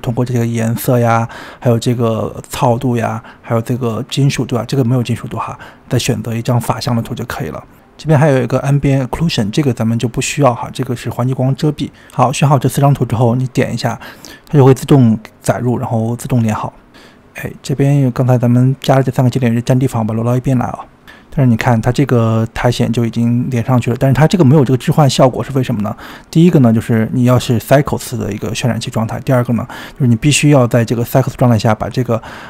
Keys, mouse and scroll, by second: 17.4 click, 18.1 click, 18.8 click, 19.4 click, 19.9 click, 20.2 click, 20.5-20.8 scroll down 1, 20.8 space, 20.9 space, 21.0 click, 21.4-22.7 middle drag, 22.7 space, 27.9 click, 29.1 click, 29.7-32.1 scroll down 27, 32.1-32.4 scroll down 1.